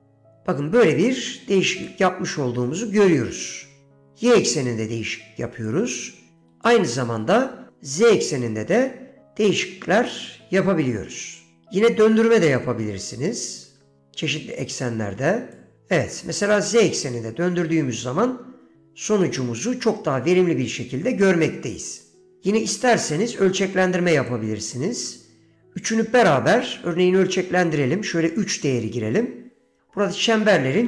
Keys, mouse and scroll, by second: 3.0 ctrl+z, 3.7-5.8 shift+drag, 6.5 ctrl+z, 6.8-11.7 shift+drag, 12.0-13.5 drag, 13.8 ctrl+z, 14.1-15.7 drag, 15.9 ctrl+z, 15.9-22.5 drag, 22.5 ctrl+z, 22.8-24.4 drag, 25.0 ctrl+z, 25.3-29.3 drag.